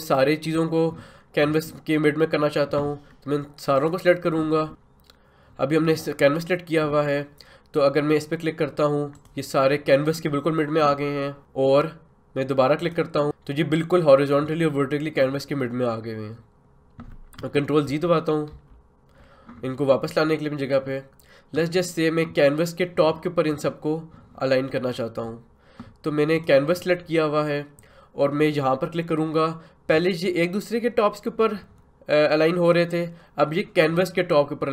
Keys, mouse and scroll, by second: 9.1 click, 12.8 click, 17.8 ctrl+z, 26.3 click.